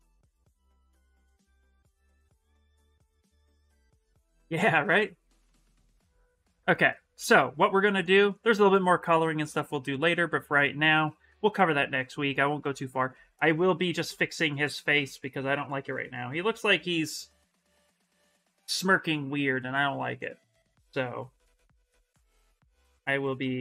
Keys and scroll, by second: 1.2 Return, 14.6 s, 18.5 s, 20.8 s, 22.4 s.